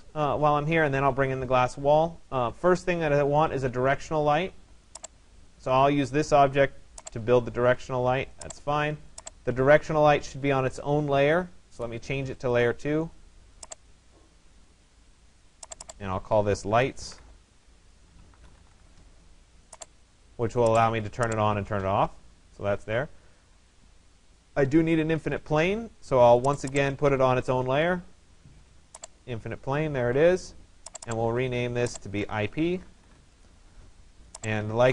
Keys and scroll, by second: 16.6 ctrl+a.